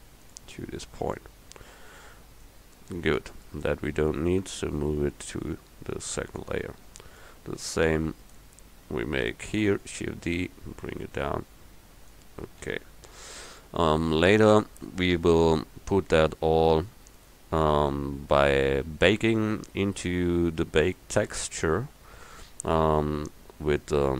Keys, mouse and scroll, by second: 2.5 middle click, 3.4-4.4 drag, 4.5 m, 7.9 click, 9.7 shift+d, 12.7 a.